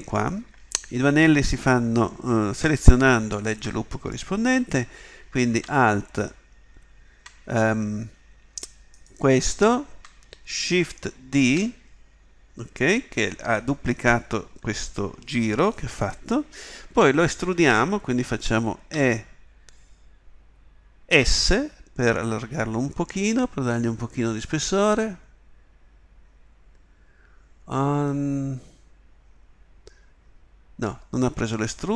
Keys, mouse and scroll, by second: 11.4 shift+d.